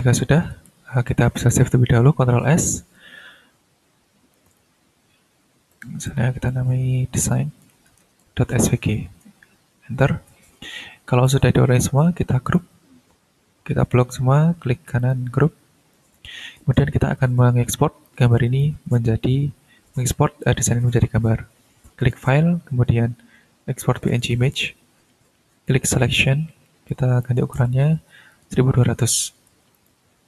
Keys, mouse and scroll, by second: 0.7 ctrl+shift+scroll up 3, 1.8 scroll down 2, 2.3 ctrl+s, 4.4 click, 5.7 click, 6.1 click, 6.9-9.7 typing, 9.0 Return, 10.3 ctrl+scroll down 2, 11.2-12.7 drag, 15.0 right click, 15.9 click, 18.0 ctrl+click, 22.0 click, 23.8 click, 25.6 click, 26.9 click, 27.5 1, 27.8 2, 28.3 0, 29.5 BackSpace, 29.7 click, 30.1 t.